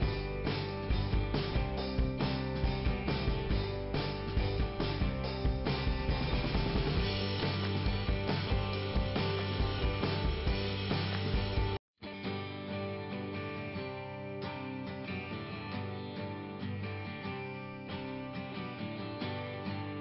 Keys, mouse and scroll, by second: 1.5 right click, 1.9-2.7 scroll down 1, 2.9 click, 3.4 scroll down 1, 4.4 click, 5.5 click, 8.0 click, 9.1 scroll up 1, 10.5 click, 11.1 scroll down 2, 12.8 click, 12.8 scroll down 1, 13.0 click, 16.1 click.